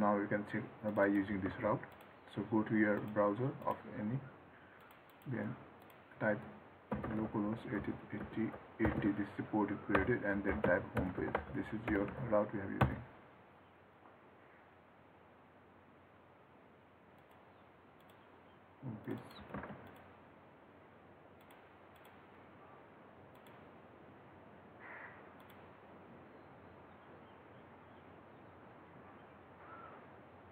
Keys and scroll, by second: 1.7 ctrl+c, 19.8 ctrl+c.